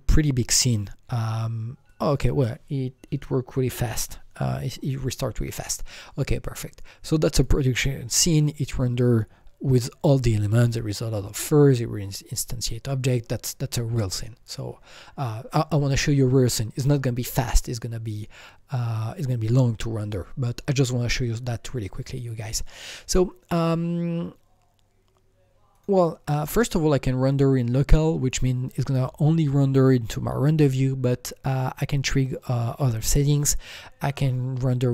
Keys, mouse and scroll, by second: 1.8-4.8 drag, 7.3 click, 7.4 shift+Escape, 25.7 click, 25.7-28.3 drag, 34.0 click.